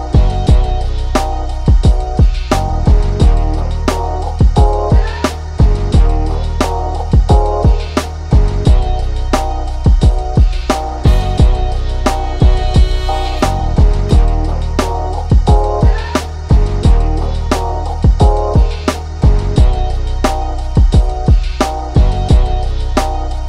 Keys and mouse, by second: 0.8 ctrl+z, 1.2-6.0 drag, 6.8 click, 8.1 ctrl+-, 9.7-12.0 drag, 12.0 ctrl+shift+], 12.7 click, 13.7 click, 18.2 ctrl+=, 19.1-23.4 drag.